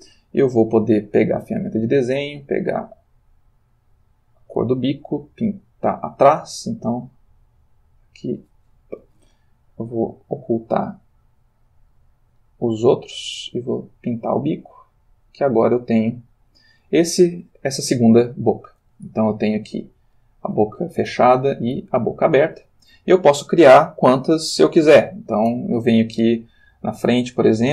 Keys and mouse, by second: 0.9 click, 2.2 click, 3.9 click, 6.9 click, 9.1 ctrl+z, 10.7 click, 11.3 click, 11.9 click, 13.4 click, 15.3 click, 15.9 click, 16.3 click, 19.4 Left, 21.2 Right, 21.7 Left, 22.5 Right, 23.6 Left, 24.2 Right, 25.5 Right.